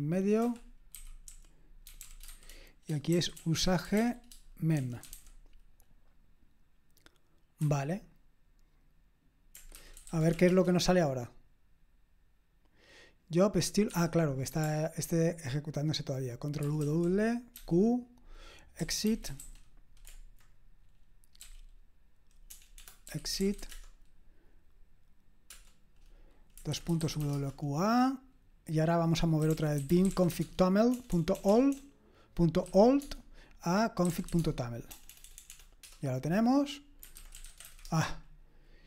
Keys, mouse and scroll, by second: 0.4 Escape, 1.0-4.0 typing, 5.1 typing, 7.6 Escape, 9.8-10.8 typing, 13.9 Escape, 16.7 ctrl+w, 16.8 ctrl+w, 17.6 q, 18.8-19.9 typing, 21.4 typing, 22.8-24.1 typing, 26.7-27.7 typing, 29.3-38.2 typing.